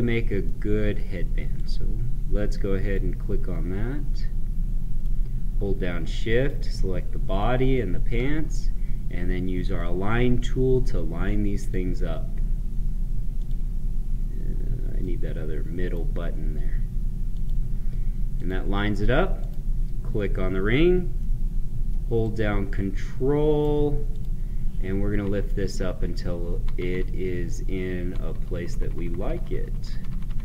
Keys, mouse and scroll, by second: 0.4 middle click, 1.5-3.6 drag, 3.6 scroll down 1, 4.9 right click, 6.3 shift+click, 14.9-17.2 right drag, 17.2 click, 21.1 middle click, 22.1-24.0 right drag, 24.0 click, 25.1 ctrl+Up.